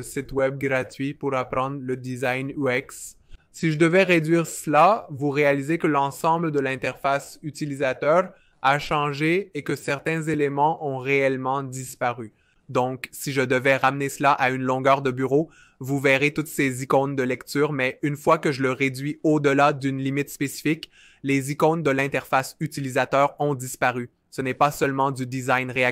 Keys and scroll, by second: 0.0-0.5 typing, 2.5 typing, 4.0-4.6 typing.